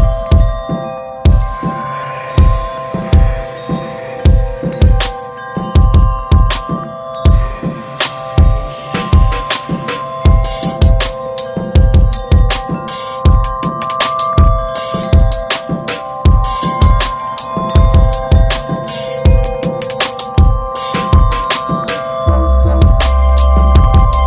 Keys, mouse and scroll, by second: 0.0 middle click, 0.2 scroll down 1, 0.4 shift+middle drag, 0.7 scroll up 1, 0.9-4.5 middle drag, 4.5 Tab, 4.7 shift+middle click, 4.9 scroll up 4, 6.3 middle click, 7.2 click, 7.8 alt+shift+click, 8.4 alt+middle click, 8.7 alt+middle click, 9.1 shift+middle click, 9.3 scroll up 2, 9.6 alt+z, 9.9 alt+z, 10.8 click, 11.6 alt+z, 12.0 click, 13.2 3, 13.9 click, 14.8 alt+z, 15.1-19.2 middle drag, 19.2 scroll down 3, 19.5 shift+middle click, 20.4-21.2 scroll up 5, 20.6 shift+middle click, 21.2 middle click, 21.9 ctrl+z, 22.3 middle click, 22.9 click, 23.7 3, 23.7 click.